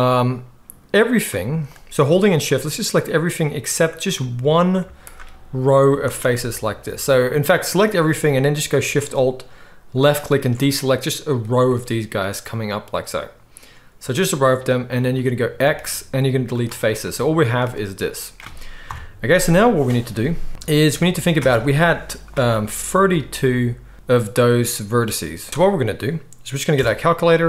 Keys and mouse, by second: 4.8 z, 6.1-7.7 alt+shift+middle drag, 7.7-10.1 drag, 10.1-25.5 alt+shift+middle drag, 15.6 x, 17.6 a, 18.8 KP_7, 25.5-27.4 drag, 25.5 x.